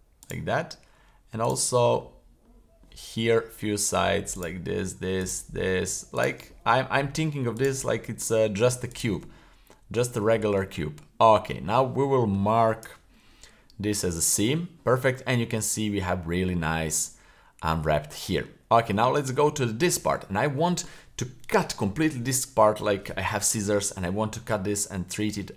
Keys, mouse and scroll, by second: 0.2 shift+right click, 1.4 shift+right click, 1.9-2.8 scroll down 2, 2.8 middle click, 3.5 scroll up 1, 4.4 shift+right click, 5.2 shift+right click, 6.1 shift+right click, 6.5-7.2 middle drag, 7.6 shift+right click, 7.9 middle drag, 8.9 shift+right click, 9.3-10.0 middle drag, 10.2-10.6 shift+middle drag, 10.7-11.5 middle drag, 11.8-12.4 middle drag, 12.8 w, 15.4-16.4 middle drag, 16.5-16.9 scroll down 1, 16.9-18.4 middle drag, 18.6-19.0 scroll up 1, 19.0-19.3 shift+middle drag, 19.4 middle click, 20.5 middle click.